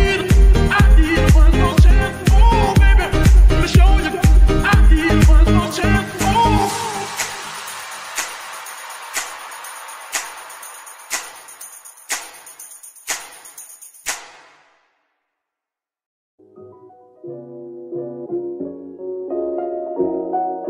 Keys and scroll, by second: 1.3 ctrl+s, 8.8 ctrl+Tab, 19.4 g.